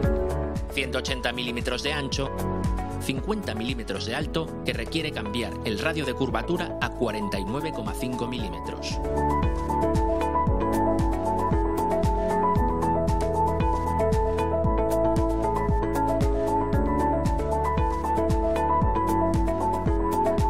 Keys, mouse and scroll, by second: 0.6-2.1 typing, 7.5-9.2 typing, 9.4 Return, 11.6 click, 12.8-13.8 typing, 14.0 Return, 16.3 scroll up 2, 17.2 right click.